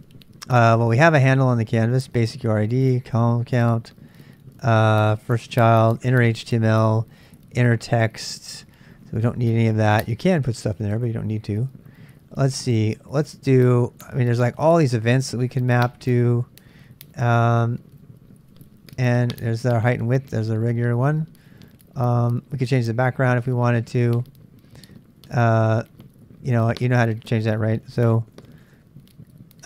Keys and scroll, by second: 28.5-29.6 typing.